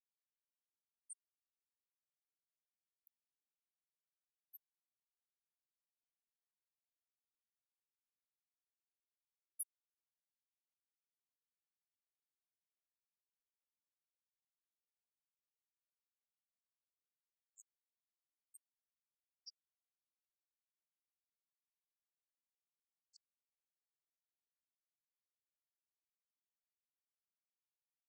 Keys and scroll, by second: 4.6 ctrl+s, 24.5 ctrl+f.